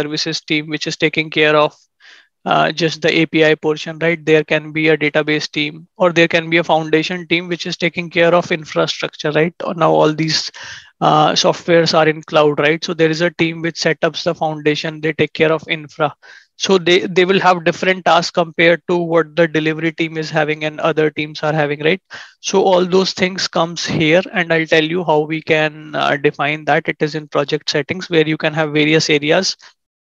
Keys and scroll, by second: 19.7 ctrl+shift+&, 22.6 ctrl+shift+@.